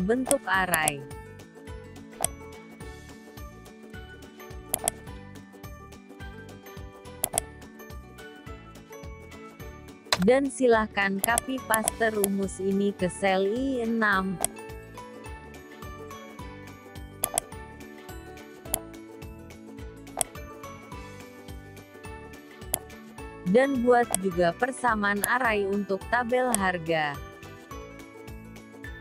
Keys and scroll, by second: 2.3 F4, 13.1 ctrl+c, 19.1 ctrl+v, 26.6 F4.